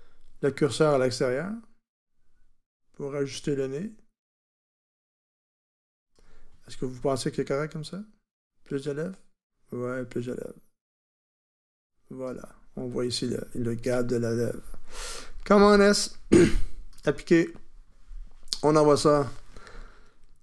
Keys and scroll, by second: 15.6 super+s.